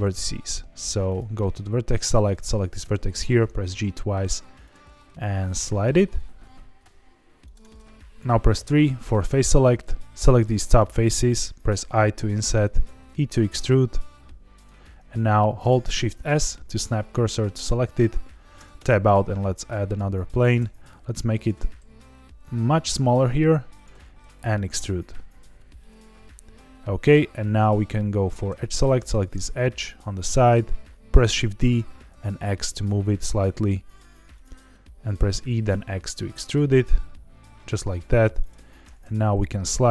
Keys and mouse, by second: 1.0 click, 2.3 click, 2.9 g, 3.1 g, 4.2 click, 4.8 g, 5.0 g, 7.4 click, 7.6 middle click, 8.1 3, 8.5 3, 10.4 shift+click, 11.7 i, 12.6 click, 12.8 e, 14.5 click, 16.1 shift+s, 18.5 Tab, 18.8 shift+a, 20.3 Tab, 20.5 s, 21.3 click, 21.8 s, 23.7 click, 23.9 e, 25.7 click, 28.4 2, 29.1-30.2 drag, 31.5 shift+d, 32.0 x, 34.3 click, 35.1 e, 35.4 x, 37.6 click, 37.9 1, 38.3 click, 38.8 g, 39.0 g.